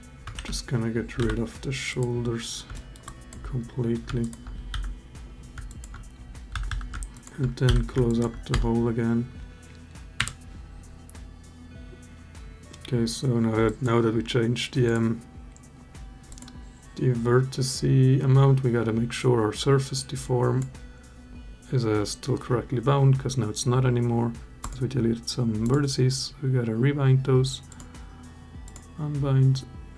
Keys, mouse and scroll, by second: 0.1 ctrl+z, 1.0 Delete, 2.5 alt+click, 2.8 alt+click, 4.5 f, 5.4 alt+click, 6.3 a, 6.5 a, 7.5 f, 7.8 alt+click, 8.3 Tab, 13.5 click, 14.6 click, 16.1 click, 20.1 click, 25.4 click, 27.5 click.